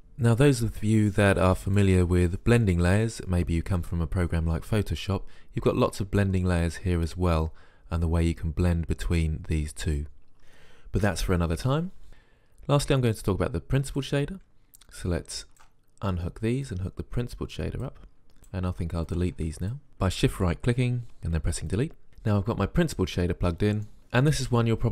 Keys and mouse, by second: 0.1-1.8 middle drag, 12.9-14.1 drag, 15.6 click, 18.8 click, 19.4 Delete.